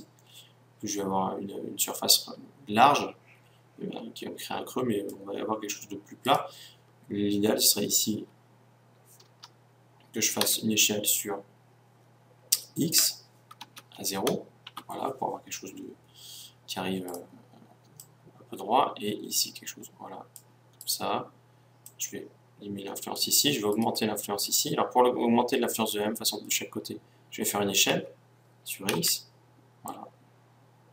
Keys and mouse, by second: 6.3-8.0 right drag, 8.1 g, 10.5 s, 17.1-18.2 right drag, 18.0 click, 18.7-19.9 right drag, 20.8-22.5 right drag, 21.9 click, 22.8-26.4 right drag, 27.9 s.